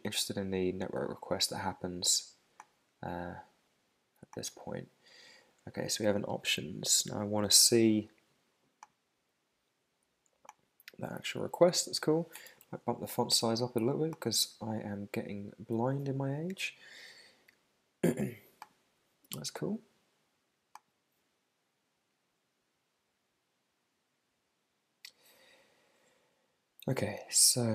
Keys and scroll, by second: 12.6 super+=.